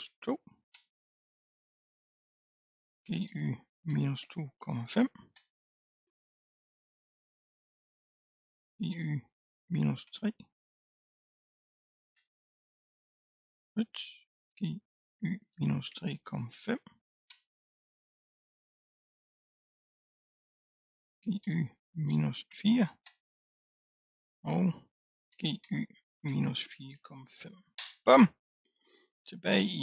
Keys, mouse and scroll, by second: 0.8 Return, 2.0 click, 3.0 g, 5.4 Return, 6.2-6.6 scroll down 3, 6.9-7.5 scroll up 1, 7.5 click, 8.6 g, 13.4-14.5 drag, 14.5 g, 17.4 Return, 18.4-19.7 scroll down 4, 19.7 click, 21.1 g, 25.3 g, 28.8-29.8 scroll up 3.